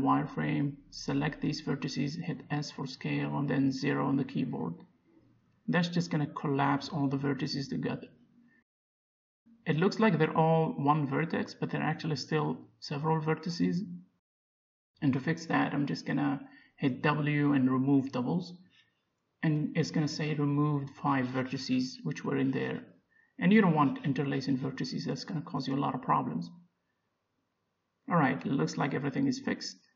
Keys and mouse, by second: 0.2 b, 2.1 s, 5.8 a, 6.1 a, 8.1-10.7 middle drag, 12.0-14.4 middle drag, 16.2 w, 21.4 Tab, 21.8-24.2 middle drag, 24.0 z, 26.2 middle click, 27.0-28.0 middle drag, 28.9-29.9 drag.